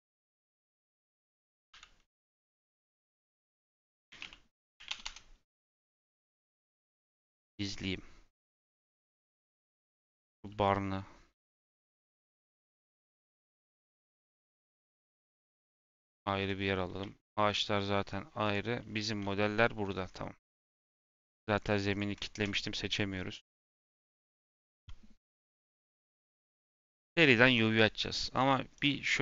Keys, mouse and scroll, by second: 0.0 shift+click, 1.6 m, 5.0 Return, 7.5 click, 9.8 shift+middle click, 10.1-12.7 drag, 12.7 m, 15.7 click, 16.5-17.0 scroll down 3, 17.0-18.4 shift+middle drag, 18.4 click, 18.8 scroll down 1, 18.9 shift+middle click, 19.1-19.9 scroll up 7, 19.6 shift+middle click, 20.0-20.5 scroll down 4, 20.5 click, 21.4 click, 22.1 click, 22.8 middle click, 23.0-23.6 scroll up 8, 23.6 middle click, 24.2 n, 26.0-29.2 middle drag.